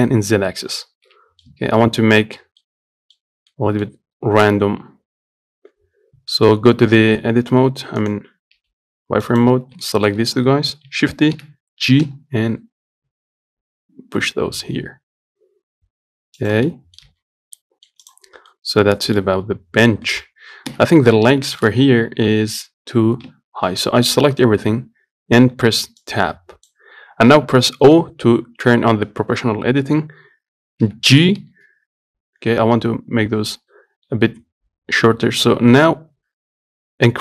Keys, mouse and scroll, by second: 1.0 middle click, 1.7 Tab, 2.0-4.7 middle drag, 4.7 KP_1, 6.4 z, 7.3 z, 9.5 Left, 10.1-11.1 shift+middle drag, 11.1 shift+d, 16.9 middle click, 17.3 z, 17.6 scroll down 1, 17.8 middle click, 18.3 click, 18.5 scroll down 1, 18.8-21.0 middle drag, 21.0 KP_1, 21.5 scroll up 4, 21.8 shift+middle click, 22.1 Tab, 22.6 z, 23.5 Tab, 23.9 click, 24.8 Tab, 26.3-28.1 drag, 28.1 o, 31.1 g.